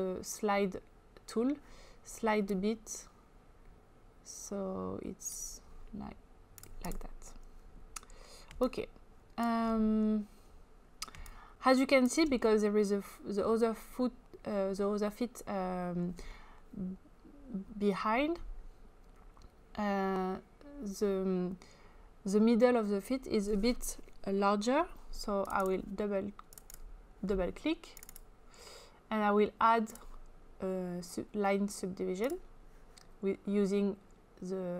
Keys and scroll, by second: 8.4 space, 11.2 space.